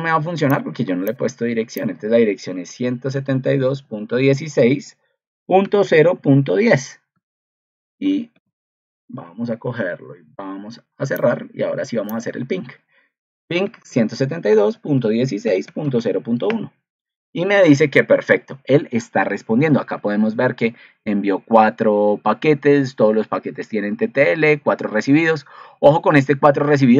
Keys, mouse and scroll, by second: 8.1 ctrl+c, 9.2 ctrl+v, 19.9 ctrl+2.